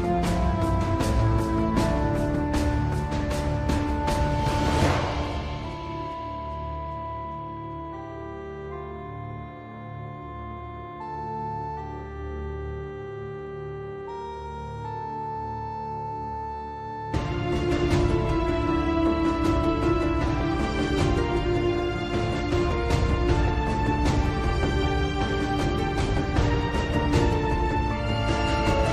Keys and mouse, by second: 5.6 click, 14.7 middle click, 15.9 click, 21.8 middle click, 25.2 click.